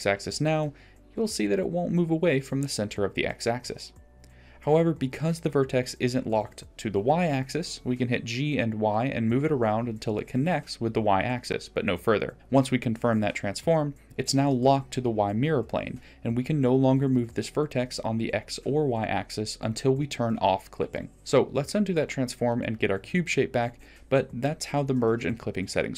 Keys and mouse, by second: 2.4-2.9 middle drag, 3.5 middle click, 4.9 g, 11.2 g, 13.5 ctrl+z, 14.4 middle click, 22.1-24.1 middle drag.